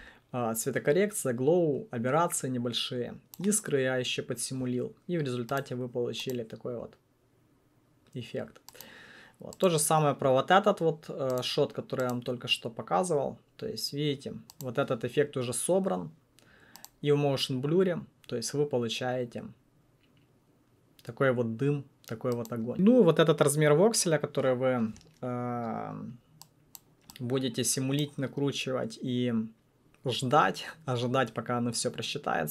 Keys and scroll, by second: 9.7 1.